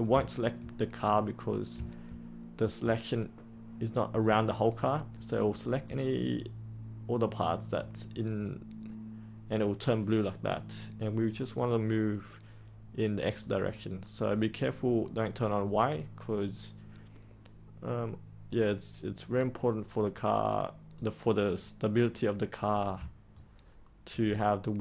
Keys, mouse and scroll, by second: 0.7-8.7 right drag, 13.2-21.9 drag, 23.2 ctrl+right click, 24.7-24.8 middle drag.